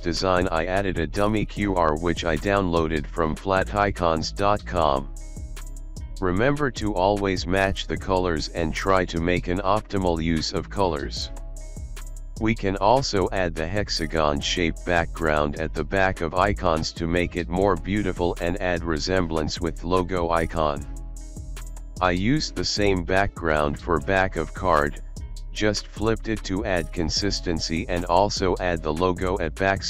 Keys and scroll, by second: 4.0 space, 7.6 alt+space, 8.5 alt+shift+space, 9.7 ctrl+alt+shift+d, 9.8 ctrl+alt+shift+d, 13.3 alt+space, 19.7 alt+space, 20.2 alt+space, 21.1 ctrl+c, 21.2 ctrl+b, 21.9 ctrl+alt+shift+b, 22.9 alt+space, 24.6 ctrl+alt+space, 24.7 z, 24.8 z, 25.2 space, 26.5 alt+space, 27.3 ctrl+s, 29.8 alt+shift+space.